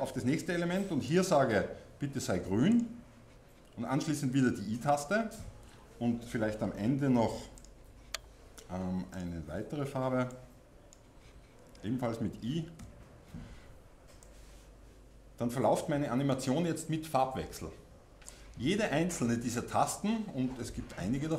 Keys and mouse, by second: 7.7-9.7 middle drag, 14.3-21.3 middle drag.